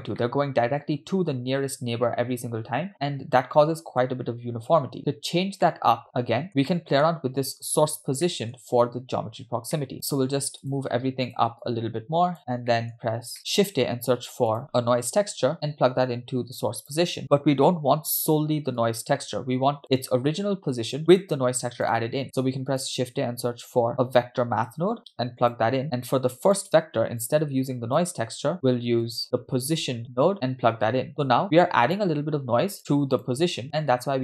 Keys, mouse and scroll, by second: 0.2-4.0 middle drag, 5.0-5.6 scroll down 4, 5.7 middle click, 6.5 scroll up 4, 6.7 middle click, 7.7 click, 8.3 middle click, 9.7-10.1 scroll down 4, 9.8 middle click, 9.9 shift+drag, 11.3 shift+click, 11.6-12.4 drag, 12.7 middle click, 13.0-13.5 scroll up 4, 13.8 shift+a, 15.6-17.0 drag, 18.8-19.8 drag, 21.2 click, 23.9 shift+a, 25.0 BackSpace, 25.9 click, 27.2-28.0 drag, 28.6 shift+a, 30.5 click, 31.9 click, 33.2 click, 33.9 middle click.